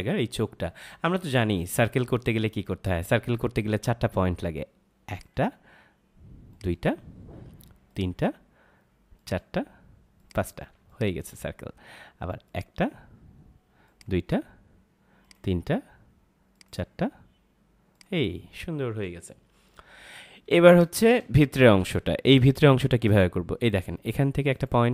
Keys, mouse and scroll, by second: 5.0 click, 10.6 space, 10.8 click, 11.1 space, 12.4 click, 17.3 click, 19.9 ctrl+-, 20.5 space, 20.7 click, 21.3 space, 24.5 click.